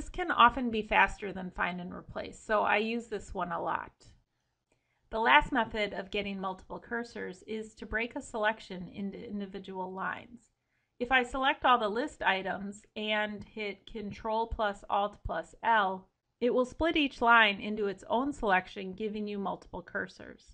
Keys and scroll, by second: 11.3 ctrl+l, 14.9 ctrl+alt+l.